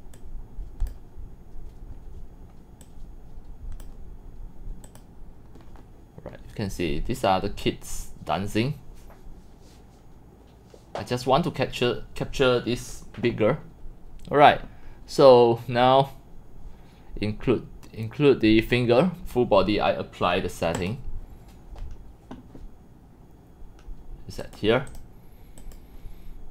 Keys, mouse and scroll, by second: 0.2 click, 2.8 click, 4.8 click, 7.9 click, 9.1 click, 20.7 click, 23.7-24.3 drag, 24.4 click, 24.9 click, 25.6 click.